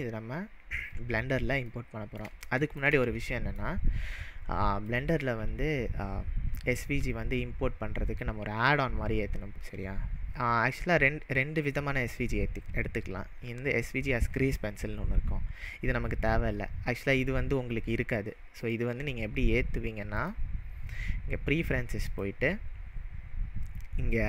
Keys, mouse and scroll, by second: 1.1-1.6 scroll up 2, 1.7-2.2 middle drag, 4.9-7.9 drag, 18.6 click, 20.2-23.2 drag.